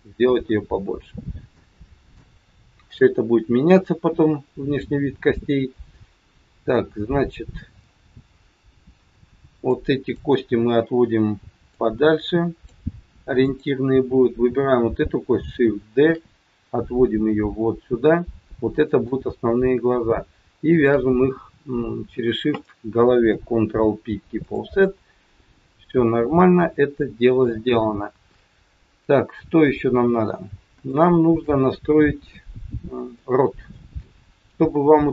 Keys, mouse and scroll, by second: 1.1 scroll up 1, 1.5 shift+middle click, 9.6 click, 11.7 click, 13.4 click, 16.0 shift+d, 20.8 shift+click, 23.3 ctrl+p, 25.7 middle click, 28.1 KP_1, 30.2-30.6 scroll up 2, 30.9 shift+middle click, 31.9-32.3 scroll down 2, 33.3 middle click, 33.9 scroll down 2, 34.5 scroll down 1.